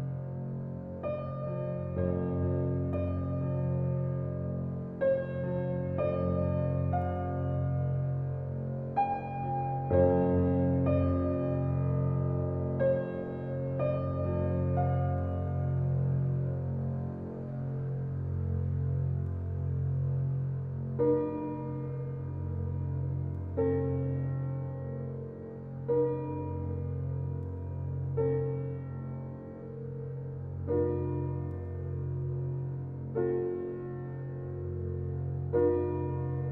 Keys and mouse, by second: 0.0 click, 0.3-1.0 drag, 1.2-1.5 drag, 1.6 click, 2.0 click, 2.4 click, 2.7-3.3 drag, 3.4-3.8 drag, 4.1-4.4 drag, 4.5-4.8 drag, 5.2 click, 5.5 click, 6.9-7.5 drag, 8.3-8.9 drag, 9.6-10.1 drag, 10.2-10.5 drag, 10.9-11.6 drag, 11.8-12.8 drag, 13.0-13.4 drag, 13.5-14.5 drag, 19.4-22.0 drag, 22.1 click, 23.2-23.7 drag, 23.9-24.3 drag, 24.4 drag, 24.8 click, 26.5 drag, 26.9 click, 27.5 click, 28.5-29.3 drag, 29.9 click, 30.3 click, 30.6 drag, 31.0 click, 31.4-34.7 drag.